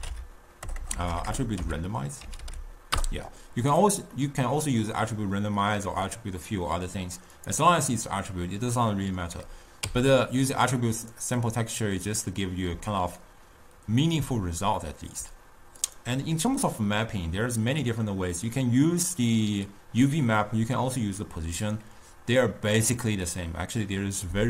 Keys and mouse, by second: 0.9 BackSpace, 1.1 BackSpace, 1.5 BackSpace, 4.6-7.4 middle drag, 7.6 click, 10.2 x, 11.3-14.6 drag, 16.0-19.1 drag.